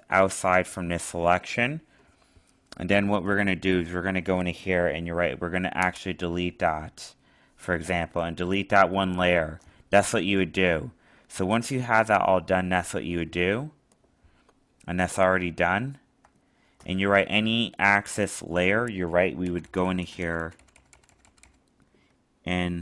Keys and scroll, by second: 15.4 alt+space.